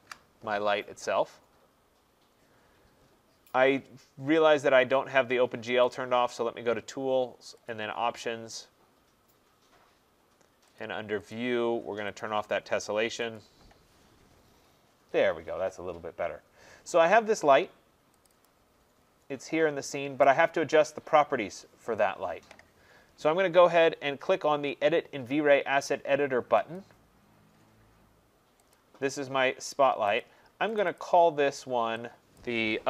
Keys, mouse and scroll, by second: 6.1 click, 7.7 click, 10.8 click, 11.4 click, 12.2 click, 13.4 click, 18.2 click, 18.4 click, 19.0 middle click, 19.1 middle click, 20.3 right click, 20.9 middle click, 21.0 middle click, 26.7 click, 28.7 click, 30.2 click, 30.8 click, 30.9 click, 32.4 click.